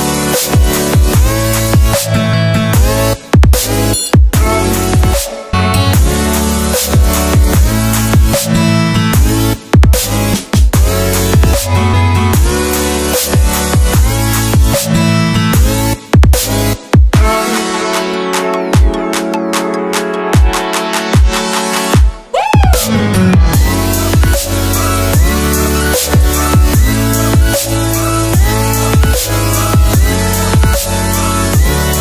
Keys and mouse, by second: 1.0-2.6 drag, 2.6 typing, 3.4 click, 4.0-4.8 drag, 5.6 click, 9.4-10.0 drag, 11.2-14.0 drag, 14.9 click, 16.2 click, 18.3 KP_0, 19.5 space, 25.8 space, 26.8 drag, 31.8 click.